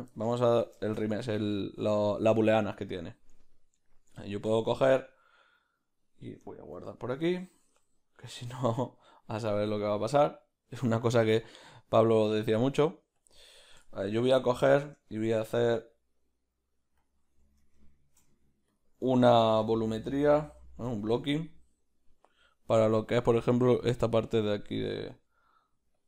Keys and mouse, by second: 15.0 Tab, 20.4 g, 25.2 s.